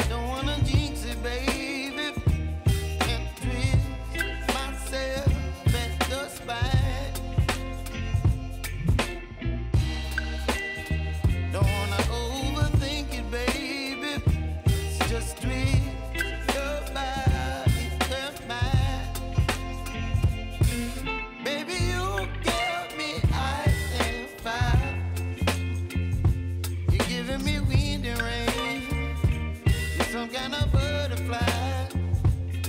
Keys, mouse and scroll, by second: 0.6 click, 1.0-1.4 alt+scroll up 1, 2.0-5.3 drag, 5.3-6.1 scroll down 1, 6.1 click, 7.4 click, 8.9 click, 13.1-28.8 drag, 30.0 p, 31.1 click.